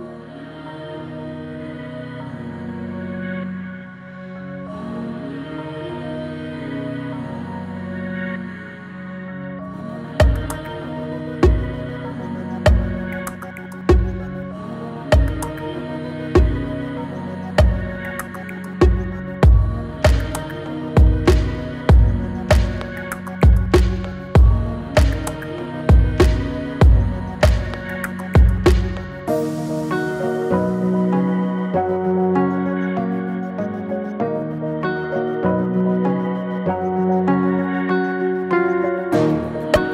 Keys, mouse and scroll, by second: 9.7 space, 11.2-12.1 drag, 14.0-14.5 shift+drag, 16.8-17.7 alt+drag, 22.1-23.3 typing, 25.1-26.9 drag, 30.4-30.7 scroll down 1, 31.7-32.6 scroll down 1, 32.6-33.8 drag, 37.4 click, 38.8 Return.